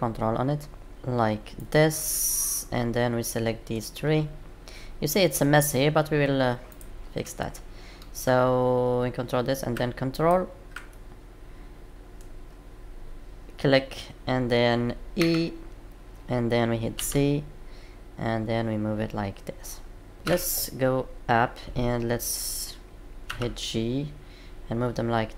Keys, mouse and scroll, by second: 2.0 middle click, 6.6 click, 10.1 ctrl+click, 10.9 middle click, 20.1 middle click, 20.2 KP_7, 23.2 g.